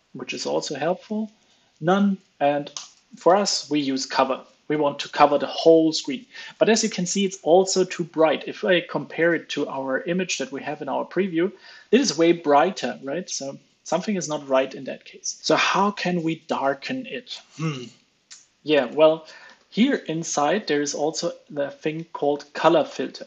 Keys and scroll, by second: 0.3 ctrl+space, 2.9 super+s, 3.4 alt+super+l, 3.6 super+s, 19.4 ctrl+space, 23.1 super+s.